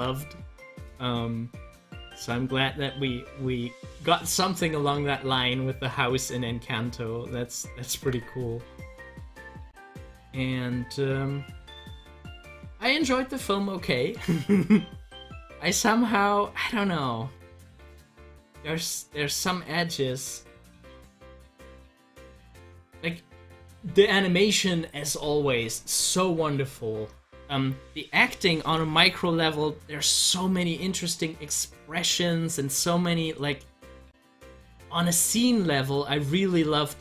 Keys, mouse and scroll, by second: 0.6-5.8 drag, 6.9 click, 7.9 ctrl+z, 20.7-24.8 drag, 26.6 click, 33.4-37.0 middle drag.